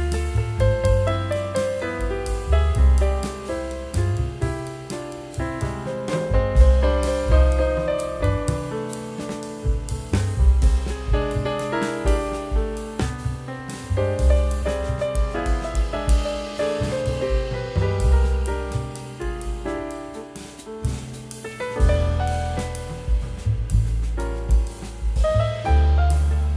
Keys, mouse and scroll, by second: 6.2 ctrl+z, 7.1 e, 7.8 double click, 20.2 w, 24.7 double click.